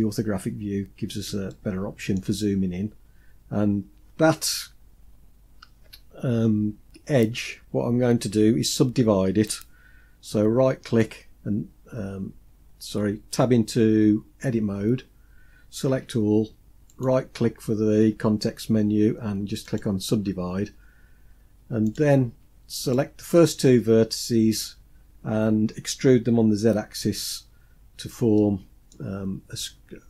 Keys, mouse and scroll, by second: 0.0-0.7 scroll up 3, 0.7 scroll up 1, 1.2 shift+scroll up 1, 1.4-1.9 shift+middle drag, 2.2 scroll up 1, 10.6 right click, 14.3 Tab, 15.6 a, 16.7-19.5 right drag, 21.6 click, 22.6-23.3 shift+drag, 27.2-27.6 scroll up 2, 27.6 scroll down 2, 28.1-28.7 middle drag, 28.9-29.5 scroll down 4, 29.9-30.0 shift+middle drag.